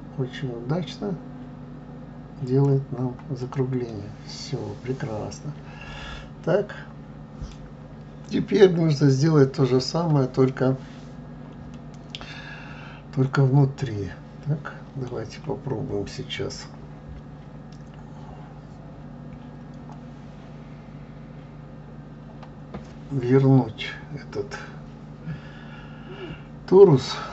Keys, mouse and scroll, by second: 3.4 click, 3.9-7.0 middle drag, 8.5-8.9 scroll up 2, 8.9 scroll down 2, 11.7-14.7 middle drag.